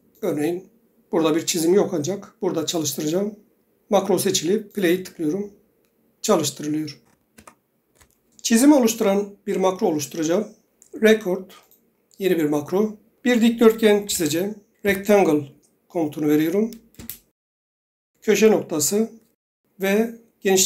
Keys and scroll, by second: 7.0 ctrl+Tab, 14.2-15.5 typing, 17.1 Return.